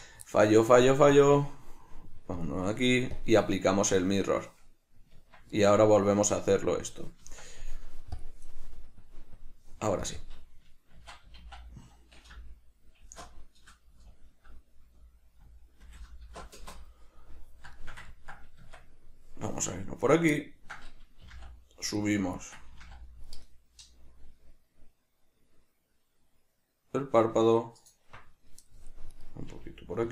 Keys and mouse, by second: 0.0 Tab, 0.0-1.1 middle drag, 1.1-2.4 drag, 3.2 click, 5.2 Tab, 7.4 Tab, 8.2 click, 9.0 click, 10.0 click, 10.2-17.8 drag, 17.8-18.7 shift+middle drag, 18.6 Tab, 20.0 right click, 20.3 middle click, 22.3 right click, 29.1 right click.